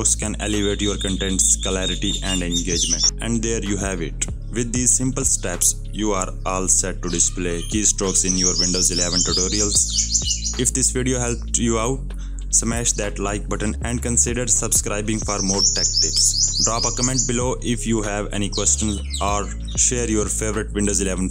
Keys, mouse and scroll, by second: 0.5 right click, 1.7 click, 3.6-7.8 typing, 8.4 Up, 8.7 Right, 9.4 Down, 9.6 click, 12.7 right click, 16.1 click, 18.1-19.3 typing, 19.2 right click, 20.0 click.